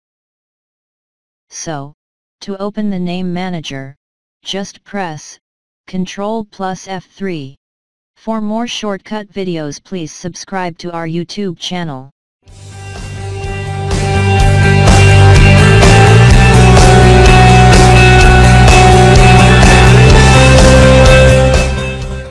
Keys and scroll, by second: 0.8 Return, 6.6 ctrl+F3.